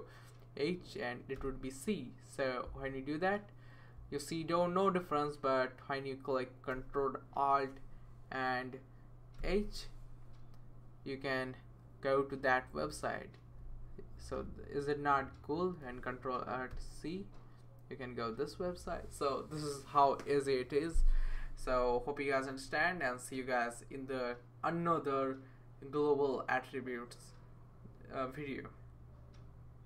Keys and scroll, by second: 1.3 c, 9.4 ctrl+alt+h, 16.7 ctrl+alt+c.